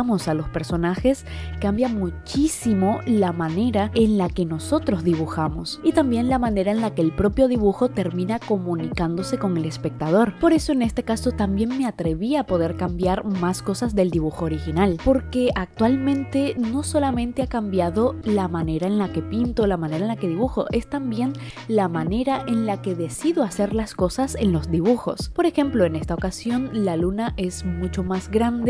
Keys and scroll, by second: 0.0-5.8 typing, 7.3-12.8 typing, 13.8-16.5 typing, 17.5-19.1 typing.